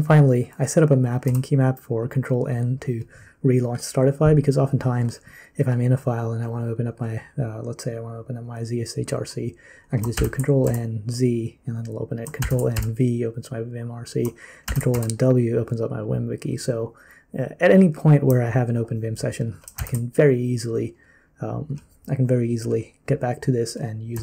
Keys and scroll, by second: 1.2 w, 10.1 ctrl+n, 10.6 z, 12.4 ctrl+n, 12.7 v, 14.6 ctrl+n, 14.9 w, 19.8 ctrl+n, 24.1 z.